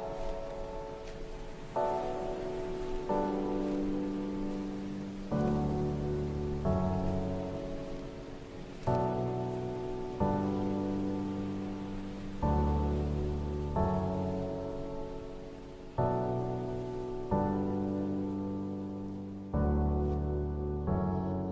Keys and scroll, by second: 0.5 ctrl+z, 0.7 ctrl+z, 3.9 v, 12.8 ctrl+g, 14.8 Delete, 18.3 Delete, 19.1 ctrl+z, 19.8 Delete.